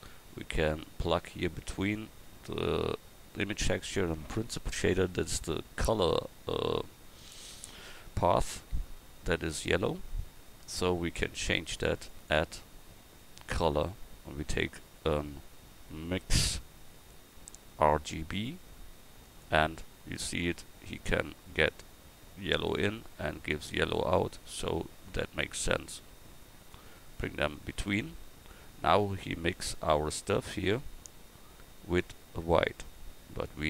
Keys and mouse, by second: 0.1-3.8 drag, 25.4-29.1 drag.